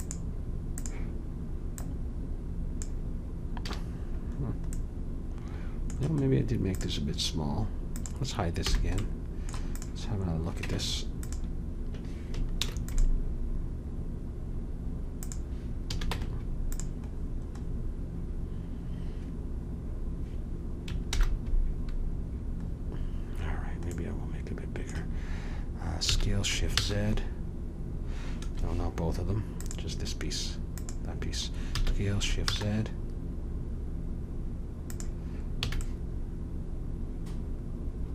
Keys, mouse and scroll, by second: 3.7 a, 6.7-11.3 drag, 8.7 h, 10.5 Tab, 11.3 Tab, 12.6 ctrl+r, 15.9 a, 16.1 Tab, 16.8 Tab, 21.0 alt+h, 26.0 s, 29.5-31.7 drag, 31.7 s, 35.6 a.